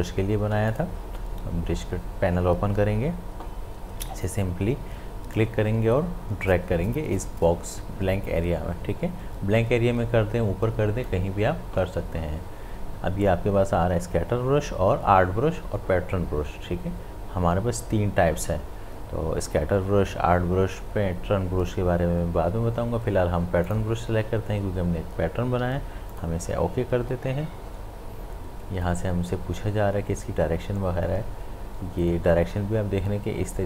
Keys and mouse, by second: 0.7 click, 5.3-13.5 drag, 23.7 click, 26.1 click.